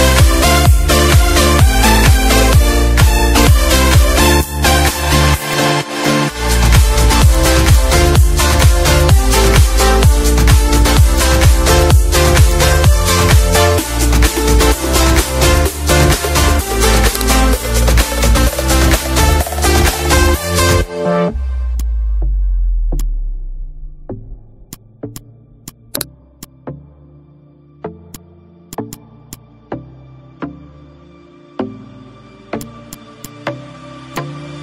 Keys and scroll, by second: 0.8 Delete, 1.8 space, 2.9 space, 5.0 F4, 9.8 Page_Down, 10.4 Page_Up, 10.9 d, 11.8 ctrl+shift+f, 16.2 b, 17.7 F2, 29.6 Down.